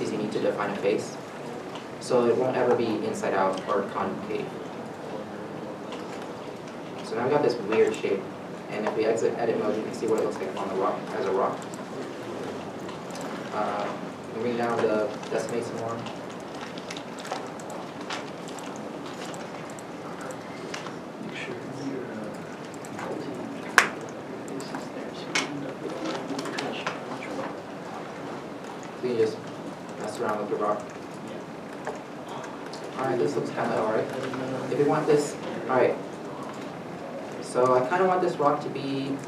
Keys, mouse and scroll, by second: 0.1 1, 0.7 2, 1.2 3, 1.9 1, 4.2 shift+middle click, 4.5 g, 5.2 middle click, 6.7 scroll down 1, 7.4 middle click, 8.0 Tab, 8.7 middle click, 8.7 middle click, 10.8-11.5 scroll up 1, 11.5 middle click, 12.6 scroll down 1, 12.8 middle click, 13.5 scroll down 1, 18.1 middle click, 18.5 Tab, 19.5 1, 20.1 middle click, 20.4 g, 21.7 middle click, 22.7 middle click, 23.5 g, 24.1 middle click, 25.6 g, 26.2 Tab, 26.8 middle click, 28.0 Tab, 29.5 g, 30.2 middle click, 30.2 Tab, 30.9 middle click, 33.2 Tab, 34.0 g, 34.5 Tab, 35.4 middle click, 35.5 shift+middle click, 37.8 Tab, 38.9 g.